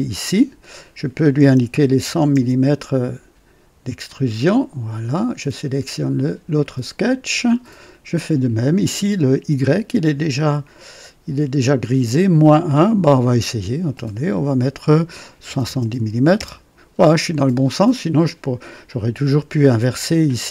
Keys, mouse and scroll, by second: 1.8-2.3 typing, 4.0 click, 6.1 click, 8.1 click, 15.4 KP_7, 15.6 KP_0, 16.3 Return.